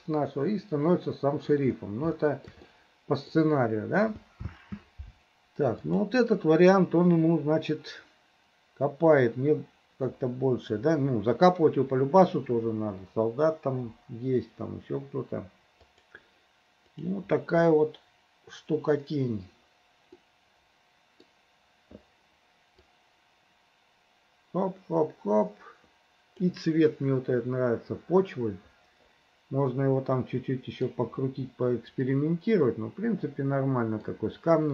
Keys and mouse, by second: 2.2 shift+middle click, 2.8 middle click, 5.1 space, 6.0-18.9 drag, 20.2-21.2 middle drag, 22.9-26.6 middle drag, 26.9-30.9 middle drag, 32.2-34.1 middle drag.